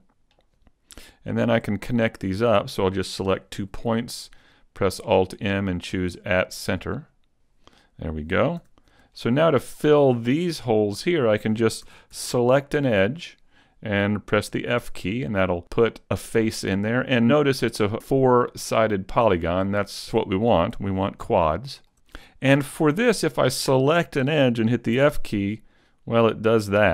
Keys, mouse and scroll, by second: 0.3-1.3 scroll down 1, 1.3 right click, 1.3-1.9 scroll down 1, 2.1 shift+right click, 3.5 alt+m, 6.9 right click, 8.6 a, 9.1 shift+middle click, 10.5 middle click, 11.9 ctrl+Tab, 12.8 right click, 14.5 f, 15.1 middle click, 16.5 scroll up 3, 17.7 right click, 18.1 shift+right click, 18.9 right click, 19.3 right click, 20.1 shift+middle click, 20.7 a, 21.4 shift+middle click, 21.9 middle click, 23.2 right click, 24.9 f, 25.7 middle click.